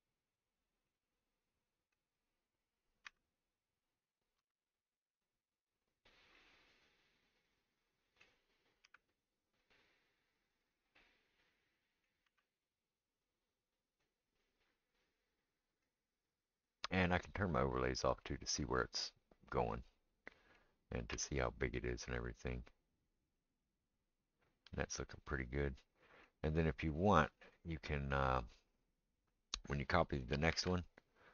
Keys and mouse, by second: 3.1 r, 4.4 g, 9.0 r, 12.2 r, 17.3 click, 21.1 g, 28.7 click, 28.8-31.3 middle drag, 30.5 shift+d.